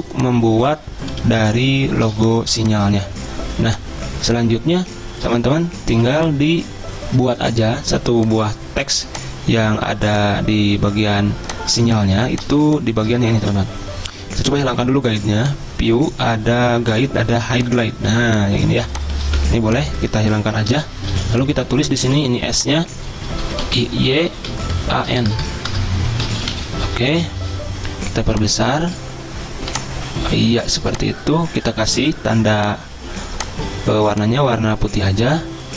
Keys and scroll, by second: 0.0 b, 1.5 ctrl+z, 2.5 v, 4.9 z, 6.1 v, 12.2 z, 13.6 v, 18.2 z, 19.4 v, 20.6 ctrl+3, 21.3-28.6 typing, 31.8-32.7 typing.